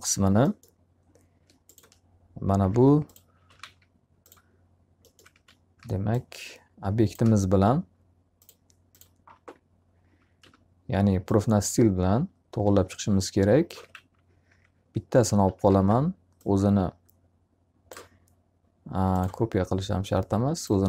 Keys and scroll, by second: 2.1 alt+q, 3.1-4.0 typing, 5.2 w, 8.7 z, 10.3 e, 13.4-14.3 typing, 14.3 F3, 15.5 w, 20.4 z.